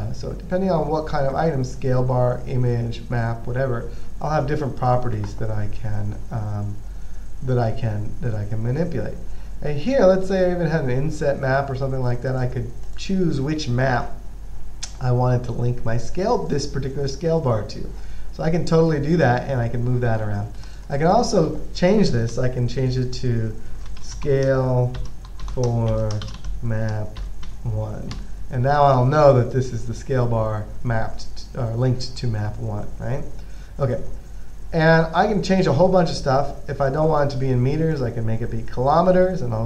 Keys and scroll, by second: 24.0-27.7 typing, 28.4 Return.